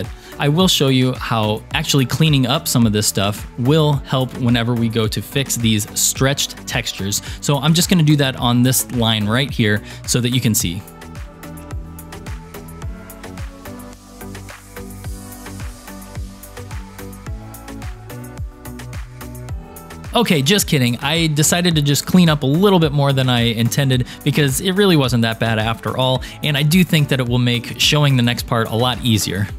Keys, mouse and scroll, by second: 5.2 Tab, 11.0 alt+Tab, 11.1 alt+click, 11.2-11.6 alt+shift+click, 11.3 alt+click, 11.4 alt+shift+click, 11.7 alt+shift+click, 11.7 scroll up 3, 11.8 scroll down 4, 11.8 scroll down 2, 11.9 Delete, 12.6 shift+middle click, 13.1 alt+shift+click, 13.6 Delete, 13.8 middle click, 14.1 alt+shift+click, 15.0 Delete, 15.0 alt+shift+click, 15.1 middle click, 15.2 alt+click, 15.4 alt+shift+click, 15.6 alt+shift+click, 15.8 Delete, 15.9 shift+middle click, 16.1 alt+click, 16.3 middle click, 16.4 Delete, 16.7 alt+shift+click, 16.8 Delete, 16.9 shift+middle click, 17.6 alt+shift+click, 17.9 Delete, 18.1 shift+middle click, 18.5 alt+shift+click, 18.6 alt+shift+click, 18.7 alt+shift+click, 18.8 Delete, 18.9 scroll up 2, 19.0 shift+middle click, 19.3 shift+middle click, 19.9 scroll down 2, 19.9 shift+middle click, 25.9-27.9 scroll up 1.